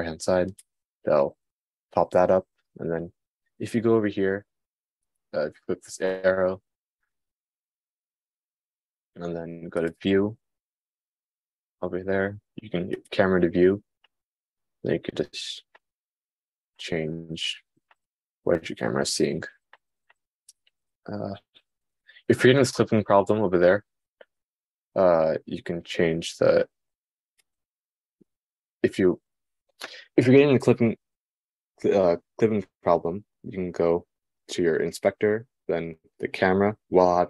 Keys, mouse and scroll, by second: 1.7 middle click, 5.6-10.3 middle drag, 13.5 middle click, 21.1-27.4 shift+middle drag, 27.4-37.2 drag.